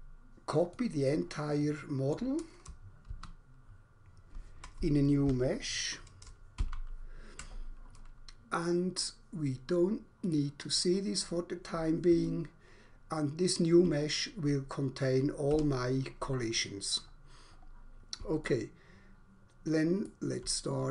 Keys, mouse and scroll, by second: 0.7 middle click, 2.2 middle click, 3.2 ctrl+c, 5.2 n, 6.5 ctrl+v, 10.1 click, 12.2 alt+click, 15.5 Escape, 17.0 scroll up 1, 17.5 scroll down 1, 18.5 alt+click, 20.5 scroll up 1.